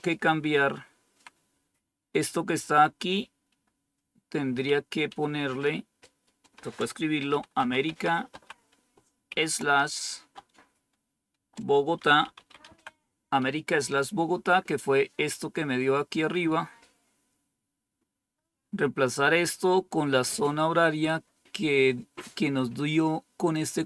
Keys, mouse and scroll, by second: 0.4-1.1 Left, 2.5 Delete, 2.8 Delete, 3.0 Delete, 6.5 Delete, 7.2 Delete, 7.3-8.3 typing, 11.0-12.9 typing.